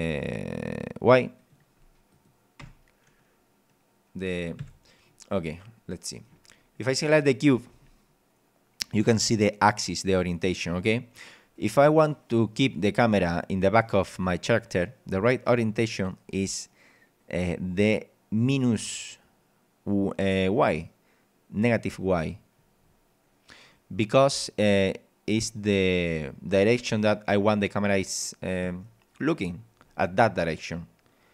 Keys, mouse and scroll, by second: 1.4 click, 2.1 click, 2.6 p, 4.6 Escape, 5.5 middle click, 7.4 right click, 7.7 z, 9.2-10.7 middle drag, 11.0 scroll up 1, 11.4 scroll down 1, 12.1 scroll down 1, 14.7-15.9 middle drag, 15.9 scroll up 1, 16.3 scroll down 1, 22.8 scroll down 2, 23.7-25.7 middle drag, 25.5 right click, 28.2 middle click, 29.8 scroll up 1.